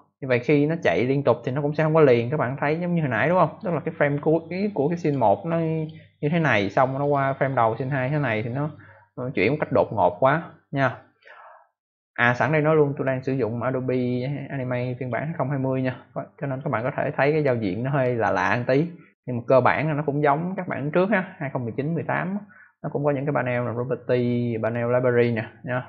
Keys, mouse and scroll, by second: 4.9 click, 5.7 click, 6.9 click, 11.0 click, 13.7 click, 14.9 click, 16.4 click, 18.9 click.